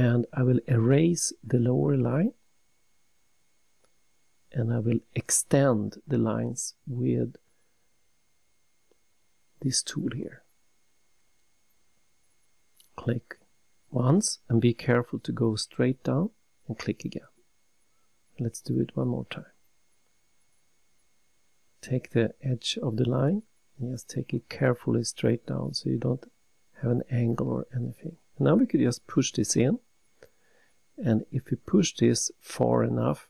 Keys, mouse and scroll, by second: 0.0-0.6 typing, 2.2 Return, 5.0 click, 5.8 click, 11.7 click, 13.3 click, 14.1-14.5 scroll up 3, 16.8 click, 19.7 click, 20.2 scroll down 3, 21.2 shift+middle click, 21.8 shift+middle click, 22.5 shift+middle click, 25.0 click, 28.4 click, 28.9 scroll down 3, 31.1 scroll up 3.